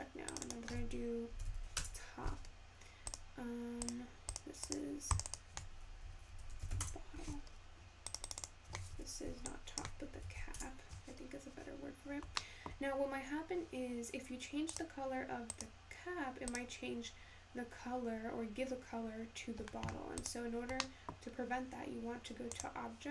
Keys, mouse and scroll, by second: 9.4-14.6 drag, 14.6-16.0 scroll up 3, 18.1 click.